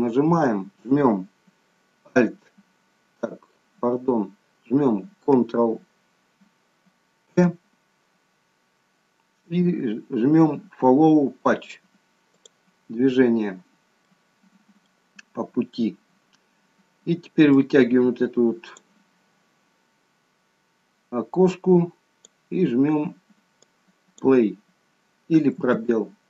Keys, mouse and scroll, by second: 2.1 a, 7.3 ctrl+p, 14.1 middle click, 17.5 click, 21.5 click, 23.6 click, 25.6 space.